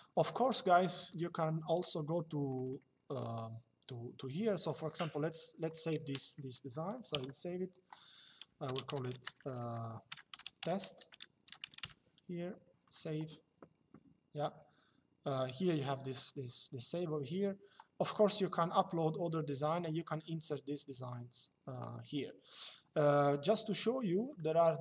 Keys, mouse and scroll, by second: 0.8 click, 2.2 click, 4.6 click, 6.0 middle click, 8.3-9.3 typing, 10.4-11.7 typing, 12.6 click, 22.7 click, 24.0 click.